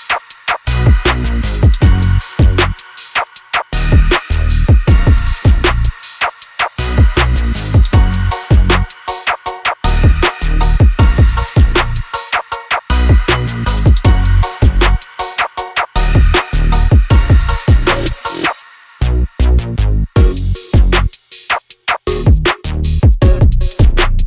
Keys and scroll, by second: 2.4 l, 9.7-12.0 typing, 13.1 m, 14.1-15.2 typing, 16.3-19.4 typing, 19.2 Return.